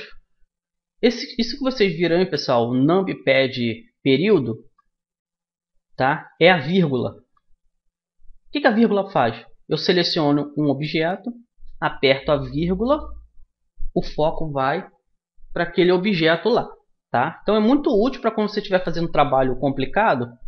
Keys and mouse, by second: 4.5 KP_Decimal, 8.1-11.0 middle drag, 11.0-12.9 right drag, 12.9 KP_Decimal, 18.4-20.4 right drag, 19.5 Tab.